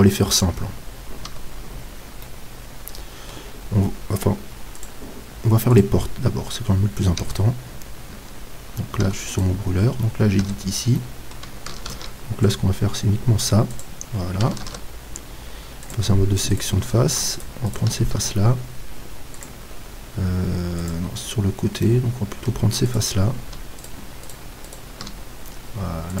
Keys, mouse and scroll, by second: 0.8 middle click, 1.3 z, 3.1 middle click, 7.2 Tab, 9.3-11.9 right drag, 10.9-11.9 middle drag, 11.9 ctrl+r, 13.8-15.7 drag, 14.7 ctrl+Tab, 16.5-19.7 right drag, 21.9 middle click, 22.9-26.2 right drag.